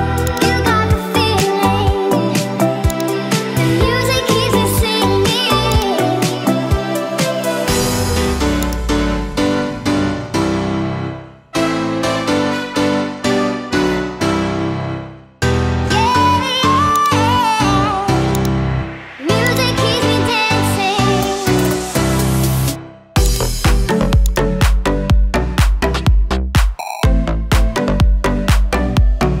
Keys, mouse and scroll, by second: 0.3 click, 2.9 click, 5.7 click, 17.0-18.5 drag, 18.1 KP_0, 19.5-22.4 drag, 23.4 click, 24.4-29.4 drag.